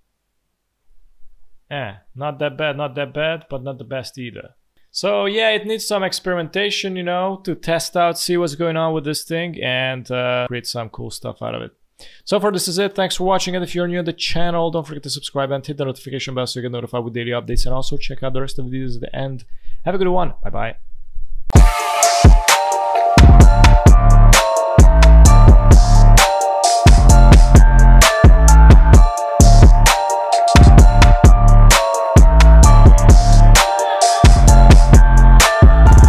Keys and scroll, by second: 1.3 space.